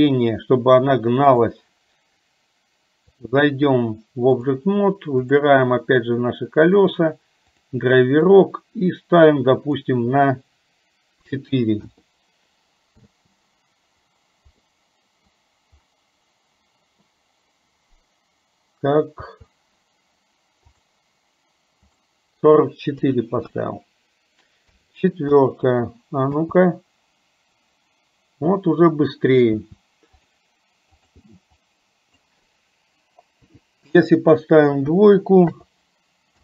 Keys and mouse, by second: 3.2-4.8 drag, 5.2 click, 6.7-12.1 drag, 13.2 space, 14.8 middle click, 19.3 space, 21.0-25.5 drag, 26.5 space, 30.3-35.7 drag.